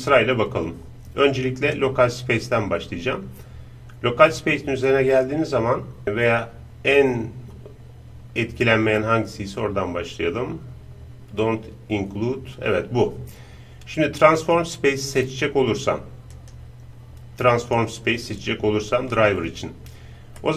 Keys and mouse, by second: 20.4-20.5 middle drag.